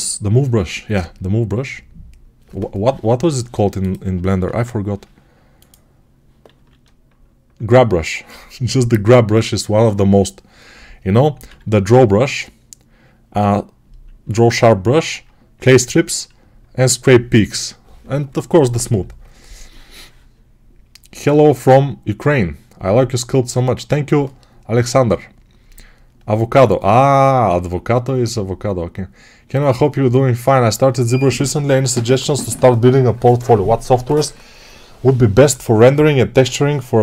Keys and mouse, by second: 4.3 ctrl+Tab, 6.4-37.0 drag, 6.4 g, 11.3 x, 14.1 1, 14.7 2, 15.4 3.